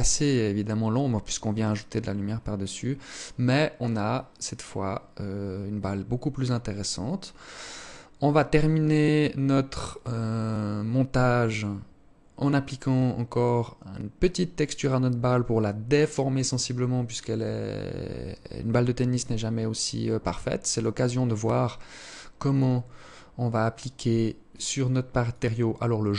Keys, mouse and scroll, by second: 19.3 Escape, 20.3 right click, 21.6 click, 22.1-22.4 scroll up 6, 23.5 click, 24.3 click.